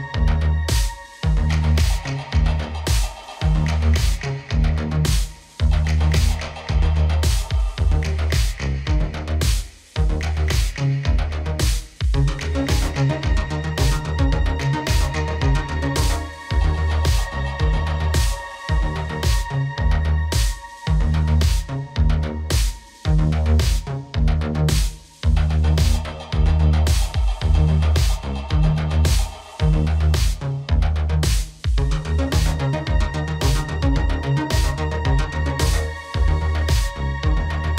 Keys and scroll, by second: 27.9 ctrl+a.